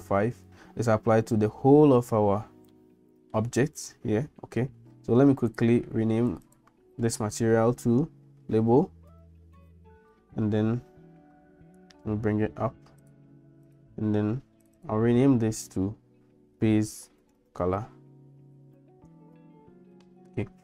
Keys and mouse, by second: 2.9 middle click, 5.6 click, 6.3 click, 6.4-10.7 drag, 13.1 click, 13.7 click, 14.7-20.6 drag.